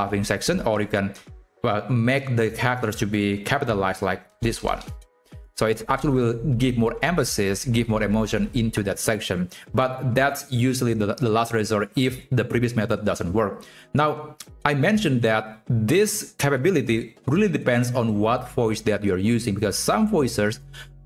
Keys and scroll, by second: 3.0-4.2 typing, 4.8 ctrl+Right, 5.5 shift+Left.